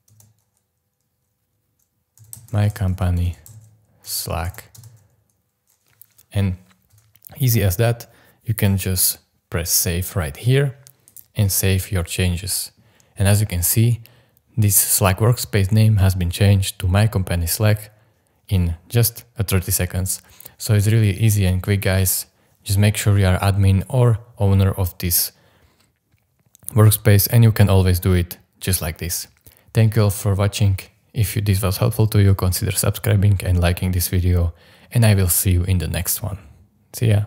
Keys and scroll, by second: 0.0-0.1 typing, 1.9-5.0 typing, 6.9 BackSpace.